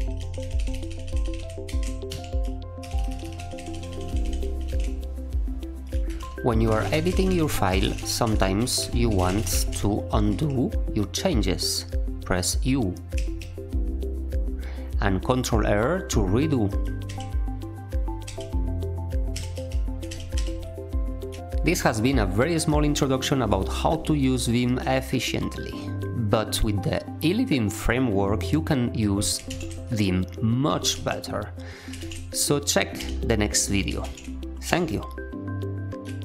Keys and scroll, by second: 0.2 ctrl+e, 0.4 ctrl+e, 0.5 ctrl+e, 0.7 ctrl+e, 0.9 ctrl+e, 1.0 ctrl+e, 1.2 ctrl+e, 1.3 ctrl+e, 1.6 ctrl+w, 2.1 h, 2.8 ctrl+y, 2.9 ctrl+y, 3.1 ctrl+y, 3.2 ctrl+y, 3.3 ctrl+e, 3.5 ctrl+e, 3.7 ctrl+e, 3.9 ctrl+e, 4.0 ctrl+e, 4.2 ctrl+e, 4.4 ctrl+e, 4.6 ctrl+e, 6.1 Return, 6.1-10.7 typing, 13.1 u, 17.0 ctrl+r, 18.2 ctrl+r, 19.3 u, 19.5 u, 20.0 ctrl+r, 20.3 ctrl+r, 21.3 typing, 29.4 ctrl+f, 30.4-31.3 typing, 31.9 ctrl+f, 32.6-35.1 typing.